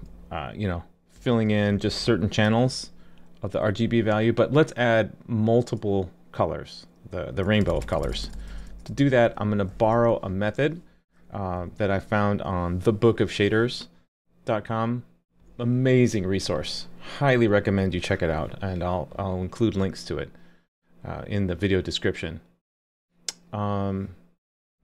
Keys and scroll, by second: 2.5 super+s, 9.7 super+s.